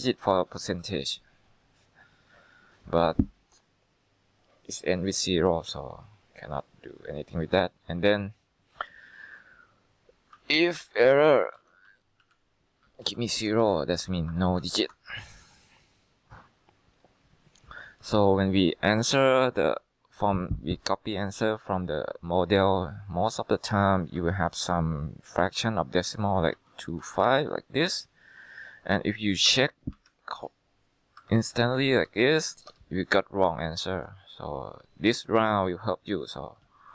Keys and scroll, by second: 10.2-11.2 typing, 11.3 Down, 11.7 Tab, 12.0 Down, 12.3 Left, 13.2-14.9 typing, 23.9-27.2 typing, 27.4 Return, 29.4-31.3 typing, 32.0 ctrl+Right, 32.1 ctrl+Right, 32.8 Return, 36.5-36.9 typing.